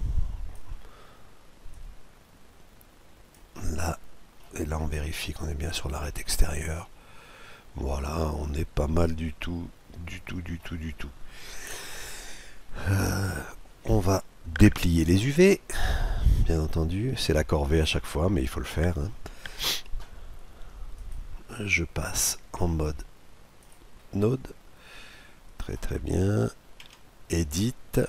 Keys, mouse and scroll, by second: 1.4-3.1 drag, 3.2-5.0 middle drag, 5.3-7.0 drag, 6.5-8.3 middle drag, 7.1 click, 12.2-13.9 middle drag, 13.9-14.6 scroll down 1, 14.6-17.6 middle drag, 17.6-19.0 scroll down 1, 19.0 scroll down 1, 20.6-22.5 drag, 24.5-26.2 middle drag, 26.5 Tab.